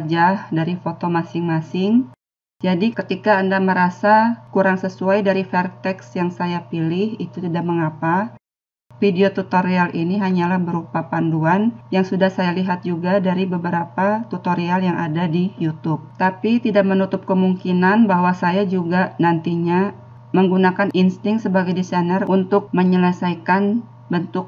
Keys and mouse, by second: 5.1-24.4 middle drag.